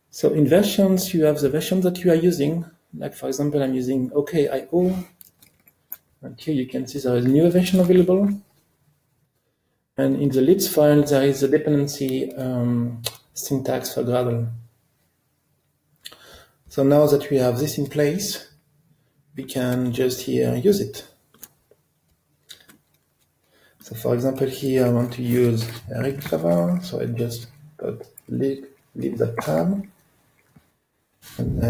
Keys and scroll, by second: 5.5 alt+Up, 24.5 alt+Up, 29.7 ctrl+space.